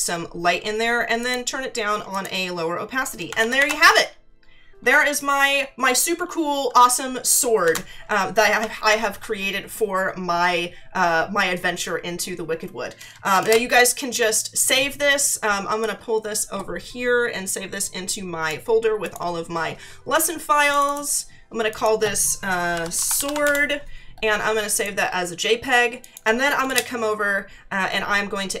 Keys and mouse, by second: 1.2 click, 7.6 ctrl+d, 8.9 ctrl+=, 13.4 ctrl+shift+s, 15.8 click, 19.0 click, 20.7 click, 22.4-23.9 typing, 24.7 click, 26.0 click, 26.6 Return.